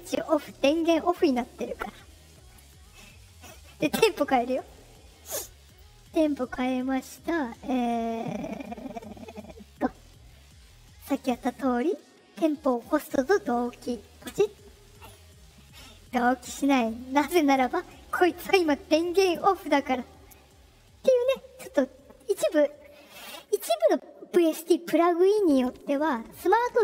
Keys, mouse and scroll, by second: 3.9 click, 5.6 click, 11.1 click, 14.2 click.